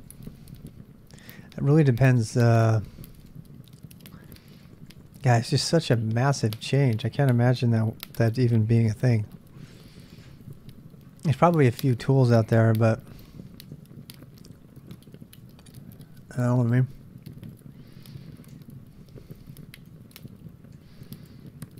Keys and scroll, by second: 0.0-6.0 typing, 8.8 Return, 13.8 ctrl+[, 13.9-15.6 typing, 16.3 ctrl+c, 18.0 c, 18.5 Return, 19.1 ctrl+[, 19.2 k, 19.3 k, 20.8 i, 21.3 ctrl+c.